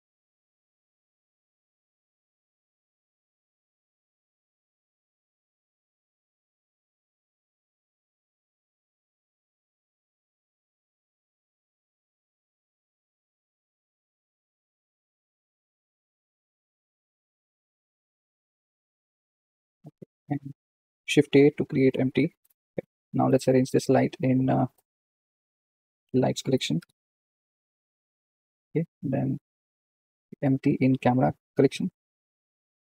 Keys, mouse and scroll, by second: 1.9 click, 2.5 g, 3.7 g, 6.4 click, 7.4 click, 8.0 click, 9.6 g, 11.0 g, 12.2 click, 12.8 g, 14.5 click, 15.1 g, 16.9 g, 19.7 click, 22.4 shift+a, 23.2 click, 30.1 click, 32.0 m.